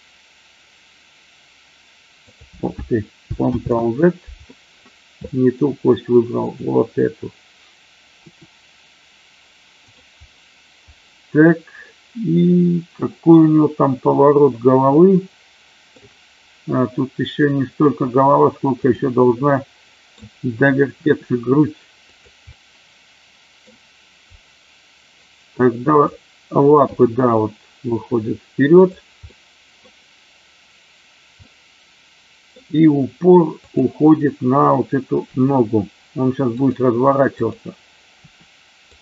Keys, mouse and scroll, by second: 2.2 click, 3.6 ctrl+z, 5.2 middle drag, 6.4 click, 8.2 r, 9.7 click, 11.9-15.9 middle drag, 18.7 click, 19.5-20.2 middle drag, 20.9 r, 22.0 click, 22.5-23.6 middle drag, 23.6 scroll down 1, 26.0 click, 26.7 g, 28.7 click, 29.2 scroll up 1, 29.3 middle click, 31.5 scroll up 1, 31.6-32.6 middle drag, 35.3 r, 37.2 click, 38.1 r, 38.8 click.